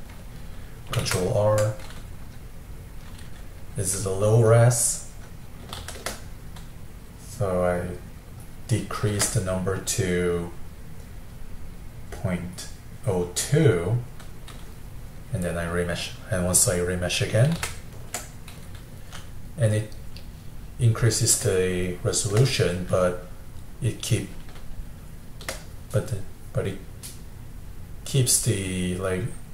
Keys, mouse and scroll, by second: 1.2 ctrl+r, 2.4-5.8 middle drag, 5.8 shift+r, 9.1 shift+r, 12.5-13.9 drag, 13.9-17.0 middle drag, 17.7 ctrl+r, 19.4-24.9 middle drag, 25.1-28.0 shift+middle drag.